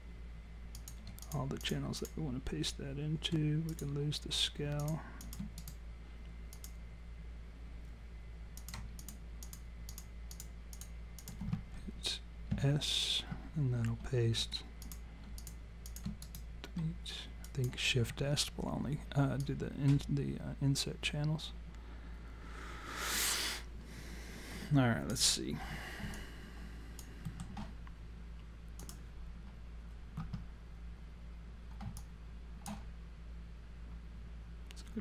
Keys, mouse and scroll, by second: 0.8 click, 1.2 shift+click, 1.4 shift+click, 3.7 click, 4.8 shift+click, 5.5 click, 5.6 right click, 8.6 click, 9.0-11.6 shift+click, 12.5 s, 14.8 click, 15.4 shift+click, 16.3 click, 16.3 right click, 19.4 click, 25.6 scroll down 1, 26.2 alt+click, 26.2-27.1 scroll down 3, 27.3 alt+middle click, 28.8 click, 32.0 alt+click.